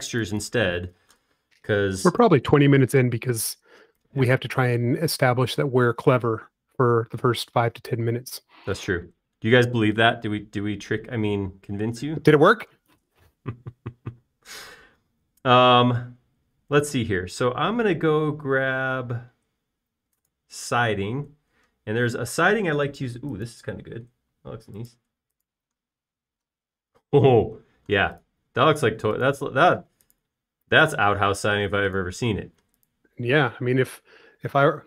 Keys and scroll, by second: 3.6 b.